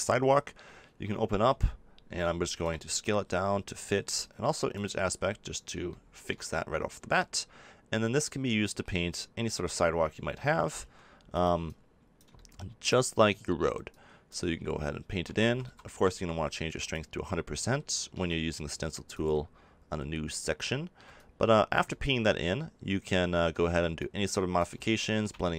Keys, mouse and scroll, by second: 4.7-6.2 drag, 6.5 middle click, 7.4 middle click, 10.8 f, 11.4-14.0 drag, 15.4 ctrl+z, 15.6 ctrl+z, 21.1-22.9 drag, 22.9-24.0 middle drag, 24.0-25.2 drag, 25.2 middle click.